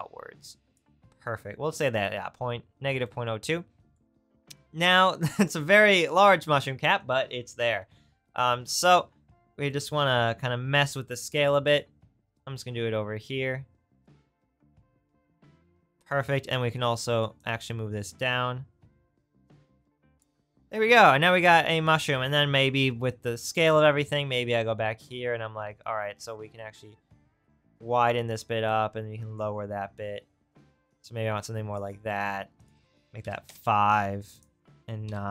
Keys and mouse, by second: 11.8 click, 20.2-24.1 drag, 25.9-35.3 middle drag.